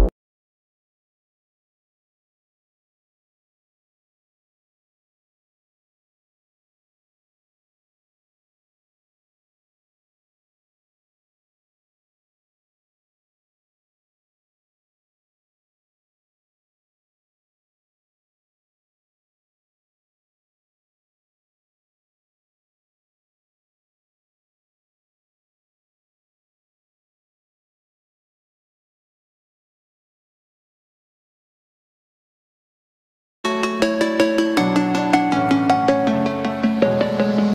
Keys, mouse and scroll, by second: 0.6 click, 5.3-5.9 scroll up 1, 5.9 click, 7.5 scroll down 1, 8.5-11.0 drag, 11.0 space, 11.1-11.5 scroll down 1, 11.7 space, 12.0 middle click, 12.3-12.7 scroll down 1, 12.7 space, 12.9-13.3 scroll up 1, 13.3 click, 13.9 scroll down 1, 14.8 click, 15.9-16.2 scroll up 1, 16.2 right click, 17.0 click, 18.6 m, 20.5 Right, 21.2 click, 21.4 space, 21.8 middle click, 22.9 scroll up 1, 23.5 m, 23.5 click, 24.8 Left, 25.0 click, 25.2 space, 25.4 click, 25.8 shift+middle click, 26.1 scroll up 1, 26.4 shift+middle click, 27.9 scroll down 1, 28.4 shift+middle click, 29.5 click, 30.5 shift+middle click, 31.6-33.4 shift+middle drag.